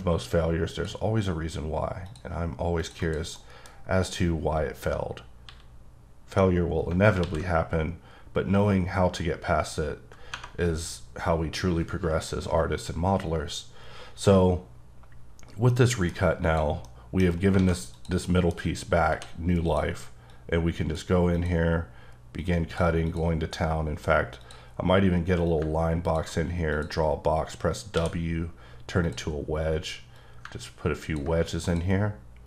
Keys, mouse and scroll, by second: 0.7 ctrl+click, 2.8 double click, 3.0 click, 3.3 middle click, 3.7 scroll down 4, 5.4 x, 10.3 x, 10.5 Tab, 15.8 middle click, 16.4 click, 16.9 middle click, 17.2-17.6 scroll up 3, 17.6 alt+a, 17.9 click, 18.3 middle click, 19.0 d, 19.2 d, 19.7 click, 20.3 click, 21.4 click, 22.4 click, 23.2 click, 24.4 click, 25.5 click, 26.8 click, 28.0 w, 29.0 click, 30.2 click, 31.7 click.